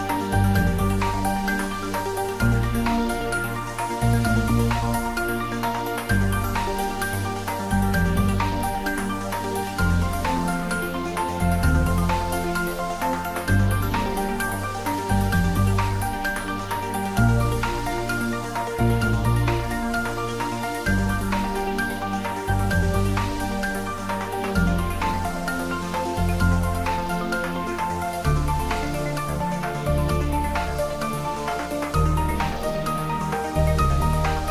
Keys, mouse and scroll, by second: 0.0 click, 2.9 click, 3.2-3.6 scroll down 1, 4.6 scroll down 1, 5.0-7.0 middle drag, 7.0 ctrl+r, 8.2 click, 9.8-11.2 middle drag, 11.2 ctrl+r, 12.3 click, 17.0 click, 17.6 ctrl+z, 18.8 ctrl+x, 19.6 click, 20.0 ctrl+x, 20.7 ctrl+click, 22.1 ctrl+z, 23.9 middle click, 24.8-25.2 scroll up 1, 25.2 middle click, 26.0-26.4 scroll up 1, 27.1-31.8 middle drag, 31.8 Tab, 32.7-34.5 middle drag.